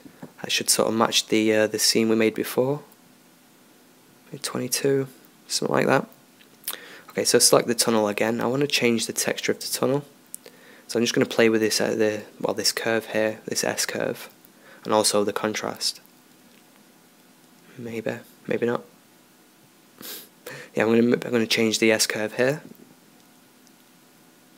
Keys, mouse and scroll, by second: 0.5-1.7 middle drag, 1.7-4.9 drag, 5.9-9.0 right drag, 9.0-10.7 drag, 14.6-23.2 drag, 23.3-24.5 drag.